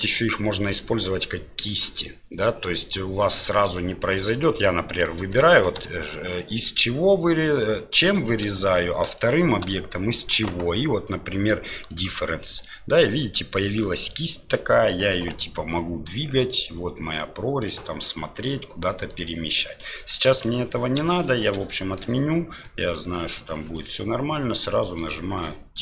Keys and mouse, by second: 2.8-3.6 middle drag, 4.2 middle click, 5.3 shift+middle drag, 9.1 shift+right click, 12.6-13.0 middle drag, 14.0 right click, 15.4 g, 19.9 middle click, 20.5 ctrl+z, 21.0 ctrl+z, 21.7 middle click, 22.6 middle click, 23.1 shift+middle drag.